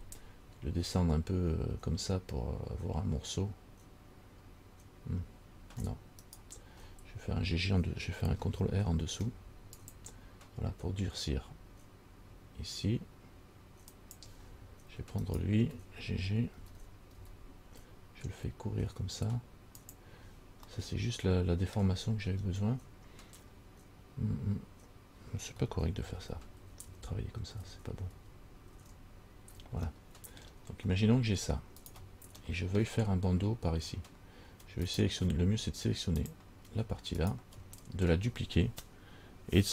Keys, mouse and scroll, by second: 9.2 ctrl+r, 15.5 alt+right click, 16.8 g, 20.9 middle click, 22.3-24.0 scroll up 2, 26.3 ctrl+z, 26.5 ctrl+z, 26.8 ctrl+z, 27.1 ctrl+z, 27.8 ctrl+z, 28.4 ctrl+z, 29.0 ctrl+z, 30.2 middle click, 31.1-31.9 scroll down 2, 32.0 alt+right click, 32.7 middle click, 35.1 alt+right click, 36.5 click, 37.4 alt+right click.